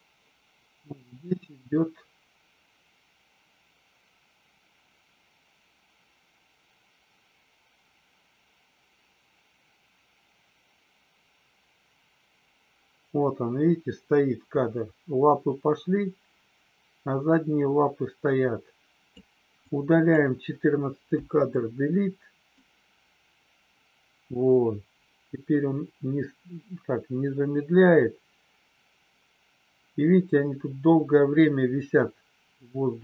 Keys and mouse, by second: 1.0-19.3 drag, 19.5 click, 21.1 Delete, 22.7-33.0 drag.